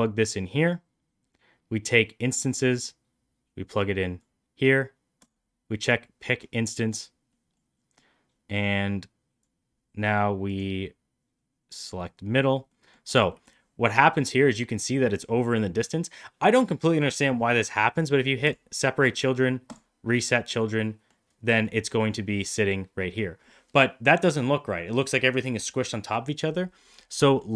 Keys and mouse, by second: 0.7 click, 1.8-4.1 drag, 5.1 click, 7.2 middle drag, 7.6 middle click, 8.6 click, 10.4-11.7 drag, 12.6 middle click, 13.2 middle drag, 18.3 click, 19.5 click, 20.4-21.0 middle drag, 21.4 middle drag, 22.6 middle click, 26.9 middle click.